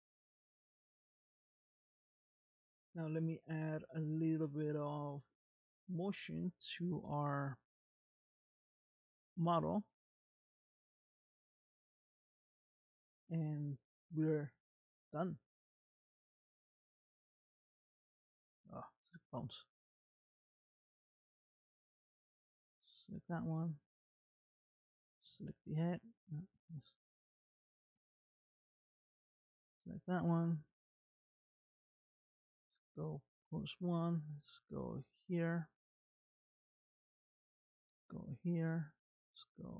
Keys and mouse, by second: 1.2 space, 5.0 click, 8.7 click, 19.0 click, 20.7 click, 26.6 ctrl+Tab, 28.0-29.5 middle drag, 31.5 click, 33.8 r, 37.7 click, 38.7 r.